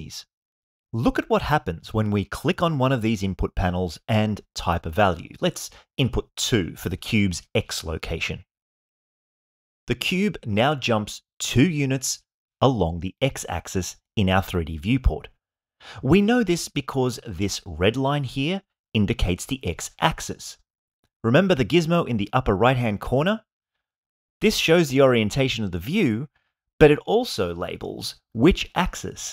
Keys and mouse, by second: 3.7-5.4 drag, 7.5-10.0 middle drag.